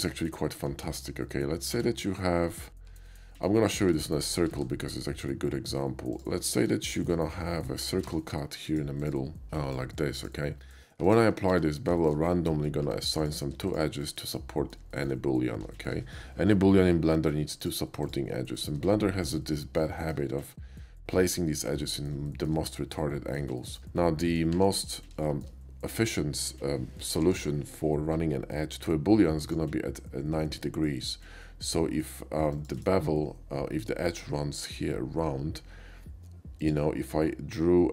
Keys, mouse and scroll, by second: 0.8 KP_5, 1.6 middle click, 1.7 Tab, 3.1 middle click, 3.3 middle click, 3.7 click, 4.0 click, 4.0 x, 4.5 shift+a, 6.1 click, 6.4 middle click, 6.7 KP_5, 7.0 shift+middle click, 7.4 middle drag, 7.6 middle click, 8.1 d, 8.7 click, 8.9 click, 9.4 click, 10.2 click, 10.9 q, 11.1 click, 11.5 Tab, 12.0 middle drag, 12.3 middle click, 12.7 middle click, 12.8 Tab, 13.2 click, 13.7 shift+click, 14.2 middle click, 14.9 shift+middle click, 15.8 shift+middle click, 17.6 shift+click, 18.0 shift+click, 18.6 shift+middle click, 19.3 scroll up 1, 19.5 shift+middle click, 20.0 shift+middle click, 21.8 shift+middle click, 22.3 shift+middle click, 23.0 shift+middle click, 23.6 shift+middle click, 24.0 middle click, 25.3 shift+middle click, 27.1 k, 29.4 click, 32.5 click, 32.8 right click, 36.6 click.